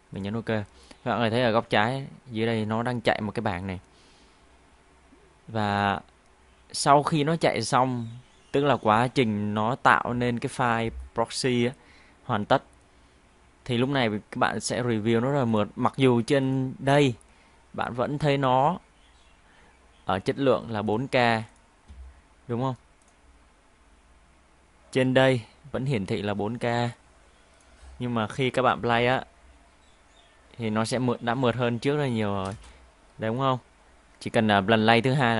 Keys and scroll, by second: 28.7 Home, 29.0 space, 32.3 space, 32.5 space.